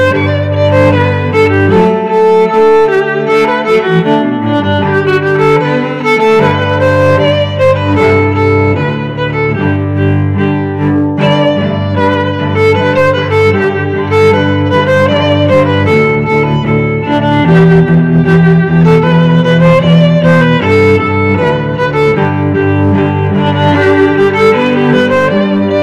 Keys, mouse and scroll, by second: 7.2-8.3 drag, 9.4 n, 11.6 s, 23.5 s.